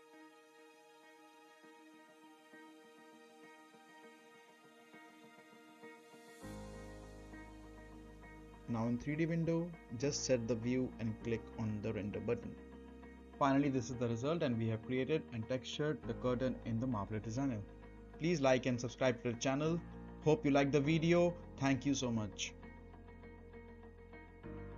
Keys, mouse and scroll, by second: 0.8-1.2 scroll down 1, 1.2 middle click, 2.0 click, 8.1 scroll up 1, 8.4 middle click, 8.7 scroll up 1, 8.9-9.4 right click, 9.1 middle click, 9.5 scroll up 1, 9.6-9.9 right click, 9.9 middle click, 10.6-11.1 click, 11.1 scroll up 1, 11.3 middle click, 11.5 right click, 11.6-12.2 middle click, 12.6 click.